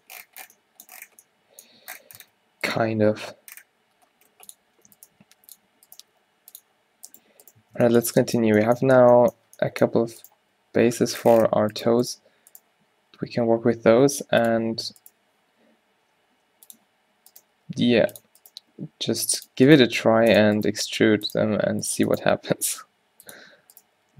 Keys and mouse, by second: 2.4 Tab, 3.1-4.3 drag, 3.1 g, 5.1 click, 5.3 g, 6.1 g, 7.2 g, 7.7 Tab, 8.6 Tab, 10.6 g, 11.5-13.9 drag, 12.2 g, 14.5 click, 16.2-17.4 drag, 17.5 g, 18.5-19.8 drag, 18.8 g, 19.8 g, 20.7 g, 22.2 g, 24.0 g.